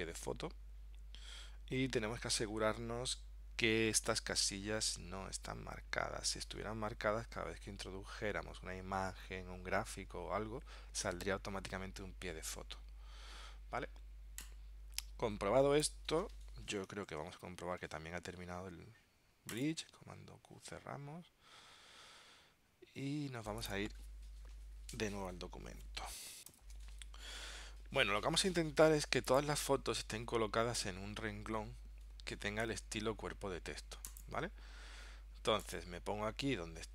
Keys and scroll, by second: 17.2 super+Tab, 20.2 super+q, 21.0 super+Tab, 26.6 ctrl+alt+super+p.